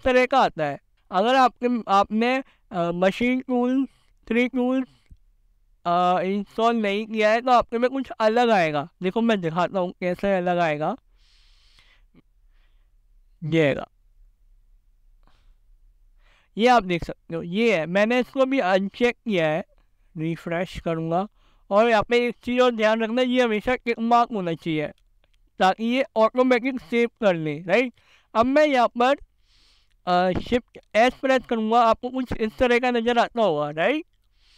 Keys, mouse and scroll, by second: 1.1 shift+s, 3.1 shift+s, 10.1-12.2 drag, 28.8 click, 31.1 shift+s.